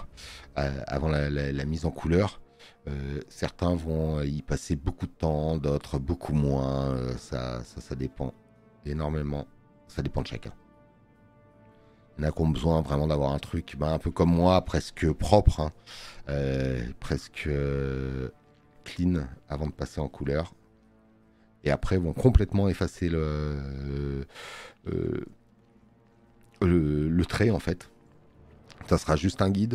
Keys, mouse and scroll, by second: 5.8 click, 15.4 space, 15.6 click.